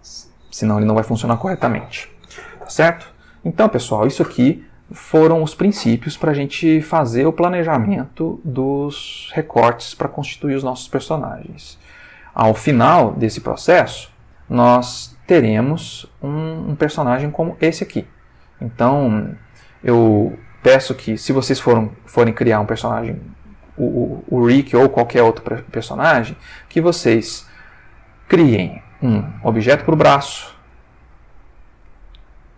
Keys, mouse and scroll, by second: 0.4 ctrl+shift+middle click, 11.7 ctrl+s, 14.1 click, 16.0 click, 18.1-18.7 ctrl+middle drag, 18.8 ctrl+shift+middle click, 20.9-22.6 drag, 22.8 ctrl+middle click, 24.8 click, 25.8 click, 26.7 ctrl+middle click, 28.1 click, 28.7 g, 30.0 Escape, 30.7 click, 30.9 g, 31.4 Escape, 32.0 shift+middle click.